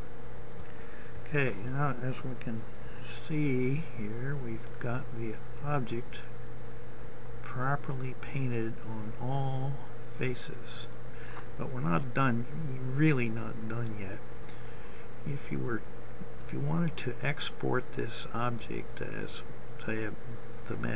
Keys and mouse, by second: 5.5 middle click, 5.9 click, 6.0 middle click, 7.2-9.7 middle drag, 14.0-20.9 drag.